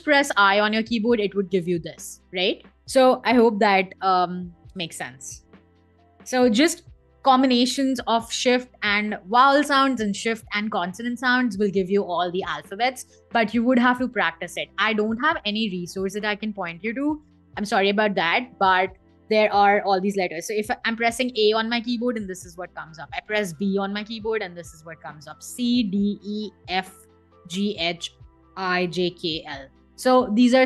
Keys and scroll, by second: 4.4 BackSpace, 5.3 Escape, 20.7 a, 25.4-29.5 typing.